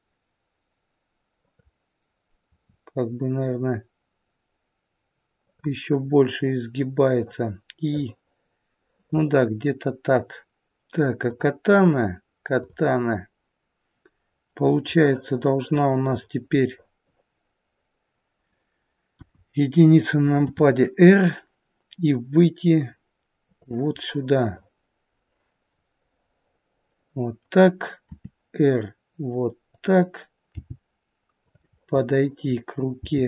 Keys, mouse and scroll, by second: 2.4 r, 6.4 middle click, 11.1 click, 12.5 click, 13.0-14.2 scroll down 2, 14.9 middle click, 16.1 middle click, 19.1 KP_1, 20.5 r, 24.0 middle click, 25.9 middle click, 28.1 r, 30.6 g, 31.8 middle click, 32.7 scroll down 1, 32.9 g.